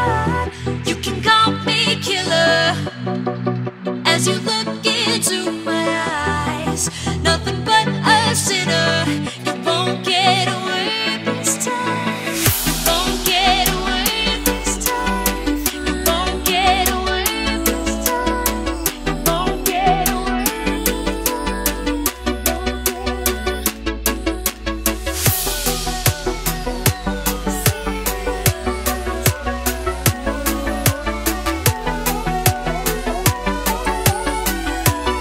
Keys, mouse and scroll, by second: 0.2 KP_Add, 0.6 KP_9, 2.6-3.3 scroll down 1, 3.3 click, 6.1 Tab, 7.3 click, 7.7-11.7 typing, 8.0 Tab, 12.1 click, 12.6 alt+Tab, 13.8 click, 14.1 c, 14.4 Tab, 15.0 v, 15.9 click, 22.9 alt+Tab, 23.7 click, 24.5 c, 24.8 Tab, 25.4 ctrl+v, 26.2 click, 26.4 Return, 27.0 click, 27.1 Return, 28.0 click, 29.0 ctrl+0, 34.3 click.